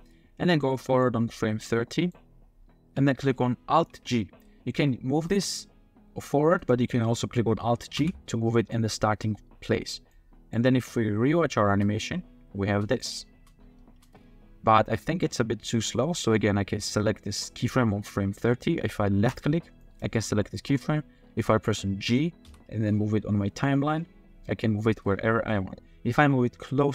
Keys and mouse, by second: 1.1-2.1 drag, 5.1 g, 6.6-7.6 drag, 8.0 alt+g, 8.5 click, 10.1-10.5 drag, 11.7 space, 12.6 space, 13.0 click, 13.3 space, 13.9 space, 14.1-15.3 drag, 19.3 click, 19.9 drag, 22.4 g.